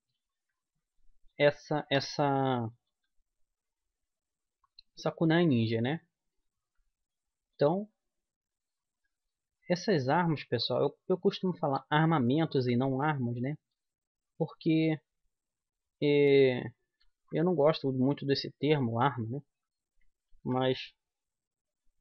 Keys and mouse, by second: 0.7-1.9 middle drag, 1.9-3.1 right drag, 3.1 g, 5.7 click, 6.6 click, 7.3 click, 7.6-11.6 middle drag, 9.8 g, 11.6-13.3 right drag, 11.9 g, 13.3 middle click, 13.6-15.5 right drag, 13.9 g, 17.3-20.5 middle drag, 19.4-21.3 right drag, 20.5 g.